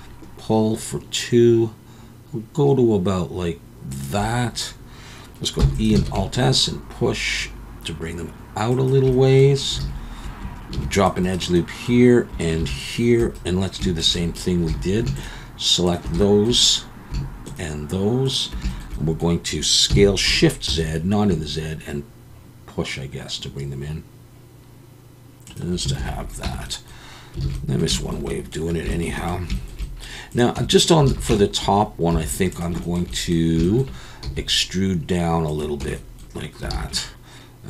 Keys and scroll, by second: 5.6 e, 6.0 alt+s, 9.8 alt+a, 10.7 ctrl+r, 12.6 ctrl+r, 14.7 alt+a, 19.9 s, 20.7 shift+z, 26.0 alt+a, 26.4 Tab, 27.4 alt+a, 30.6 Tab, 31.1 alt+a, 32.1 3, 34.2 e, 35.8 Tab, 36.7 alt+a.